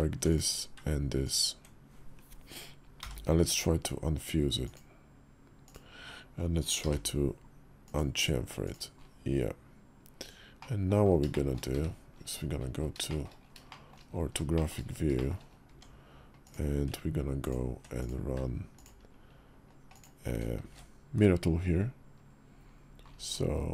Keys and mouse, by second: 1.0 ctrl+click, 2.8 y, 6.6 y, 10.4 middle click, 11.0 shift+middle click, 12.8 shift+click, 13.5 shift+click, 14.3 shift+click, 14.9 shift+click, 15.4 Tab, 16.2 click, 17.8 click, 18.5 ctrl+click, 19.7 ctrl+click.